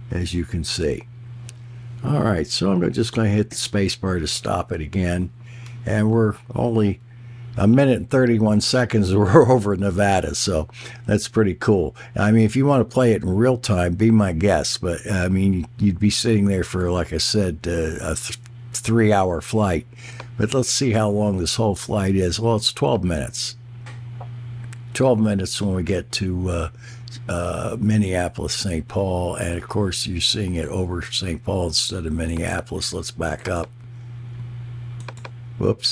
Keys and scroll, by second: 3.5 space.